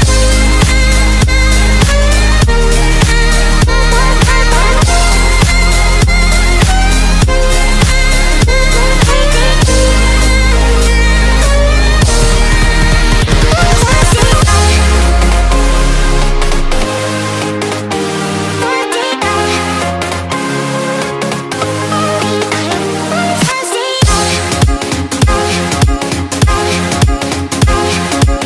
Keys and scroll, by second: 1.7 z, 2.9 x, 5.6 space, 9.0 z, 11.1 x, 13.3 z, 16.7 z, 19.9 x, 21.6 x, 23.4 space, 23.7 x, 27.0 x.